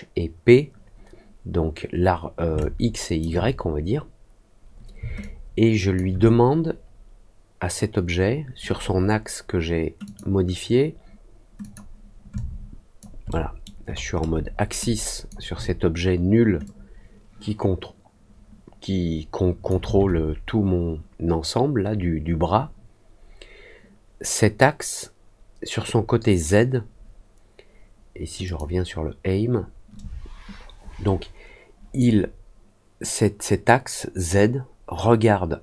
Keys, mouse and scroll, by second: 2.5 alt+click, 10.0 click, 11.5 click, 12.3 alt+click, 13.2 alt+middle click, 13.8 alt+middle click, 14.4 alt+middle click, 14.7 alt+click, 16.6-19.6 drag, 28.4 click.